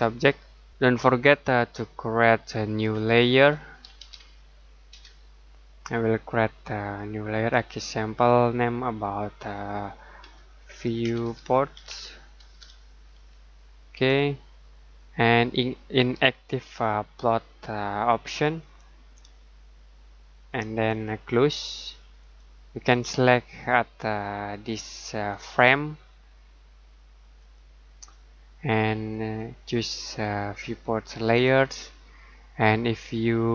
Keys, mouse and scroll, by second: 2.8-4.9 typing, 9.6 typing, 11.0-12.3 typing, 13.9 click, 18.2 click, 22.2 click, 25.3 click.